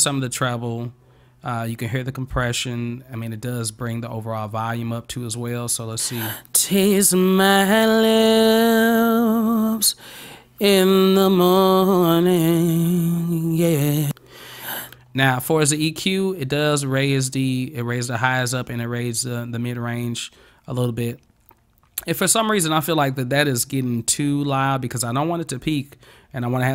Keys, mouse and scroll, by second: 5.9 click, 7.2 scroll up 1, 14.9 click, 16.5 click, 16.7 click.